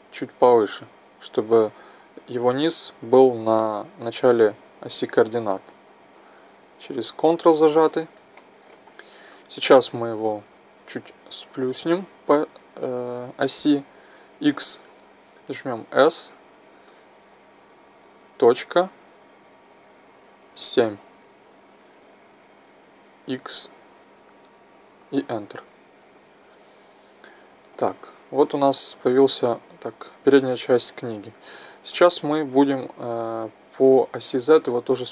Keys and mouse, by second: 5.7-8.5 drag, 8.5-12.0 middle drag, 15.9 s, 27.8-32.7 middle drag, 34.0-35.1 middle drag.